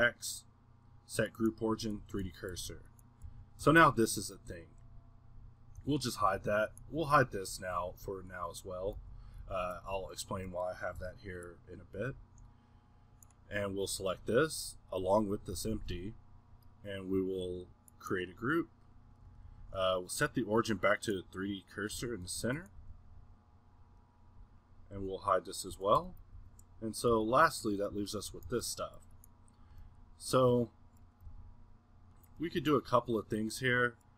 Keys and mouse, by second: 0.2-2.0 middle drag, 2.0-3.6 typing, 4.6-5.2 drag, 5.2-5.8 middle drag, 5.8 h, 6.8-7.8 middle drag, 7.8 h, 8.9 z, 9.4 a, 9.7 a, 10.8 middle drag, 11.0 b, 21.9 z, 22.3 a, 23.1 g, 23.8-25.0 middle drag, 25.0 h, 25.9 z, 26.3 a, 27.1 z, 28.1-28.5 middle drag, 28.5 a, 29.5-31.3 middle drag, 31.3 g, 32.4-34.1 middle drag.